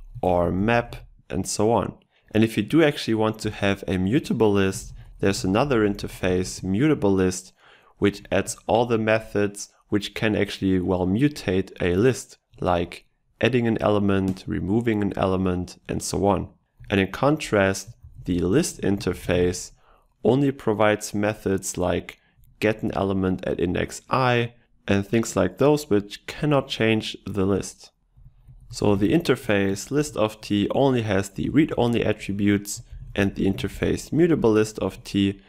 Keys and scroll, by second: 0.3 ctrl+BackSpace, 16.9 Delete, 29.0 ctrl+BackSpace.